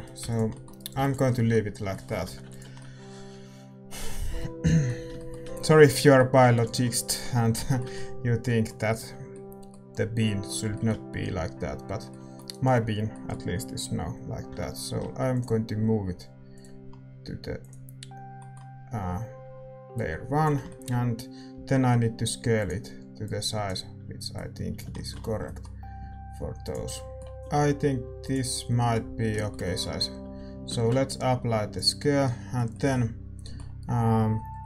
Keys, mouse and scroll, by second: 1.3 ctrl+s, 1.3-15.3 middle drag, 1.3-2.7 right drag, 1.3 x, 2.3 a, 2.7 ctrl+s, 6.8 ctrl+s, 15.3 m, 17.6-28.5 drag, 18.3-23.2 middle drag, 21.5 s, 24.9-27.3 middle drag, 25.9 s, 27.9 s, 28.5-31.8 middle drag, 31.8 ctrl+a.